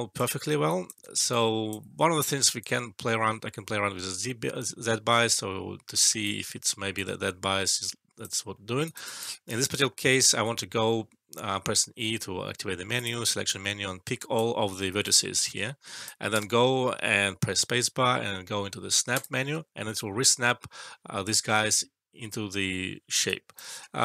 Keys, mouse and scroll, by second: 0.1-1.9 alt+click, 1.0 alt+right click, 1.2-4.1 alt+drag, 6.2-6.8 alt+click, 6.9-8.2 alt+drag, 8.5 alt+middle click, 8.8 alt+right click, 9.0 alt+click, 12.9-14.3 drag, 16.3 space, 19.1 click, 19.9-21.7 alt+click, 23.2 alt+right click, 23.9 alt+middle click.